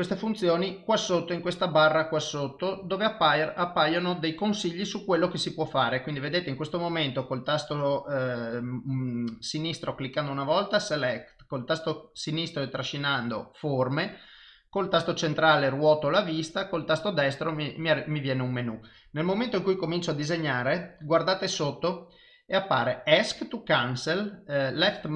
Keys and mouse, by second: 19.9 click.